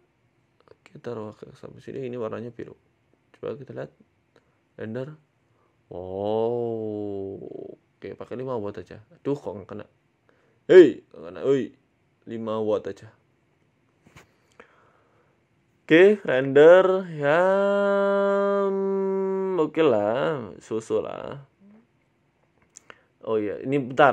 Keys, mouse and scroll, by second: 0.3 g, 1.4 g, 2.9 click, 4.0 z, 6.3 click, 8.0 right click, 9.2 right click, 10.9 right click, 11.0 right click, 11.0 z, 12.0 right click, 12.7 click, 13.7 z, 17.5 scroll down 1, 18.1 scroll down 3, 22.6 z, 22.6 shift+middle click, 23.1 right click, 24.0 click.